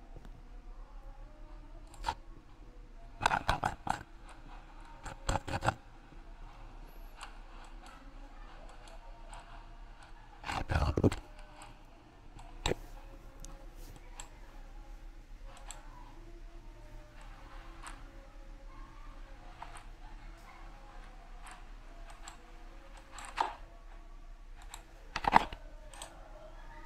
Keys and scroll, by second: 4.5 ctrl+z.